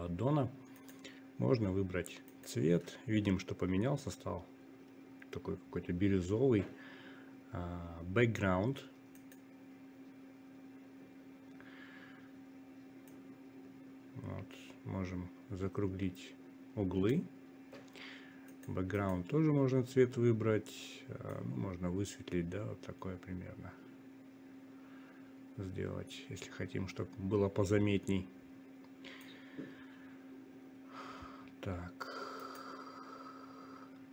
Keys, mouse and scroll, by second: 4.4 click, 12.8 click, 16.7-22.3 drag, 22.6 click.